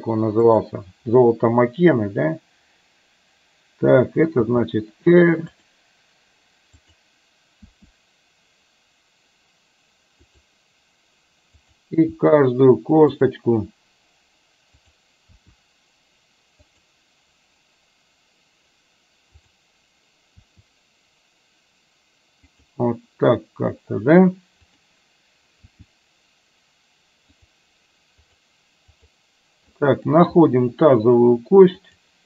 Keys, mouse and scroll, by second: 0.5 click, 4.5 r, 7.8 r, 12.3 r, 14.9 click, 15.4 r, 19.5 click, 20.5 r, 24.8 click, 25.8 r, 28.3 click, 29.0 click, 29.9 middle click, 31.9 click.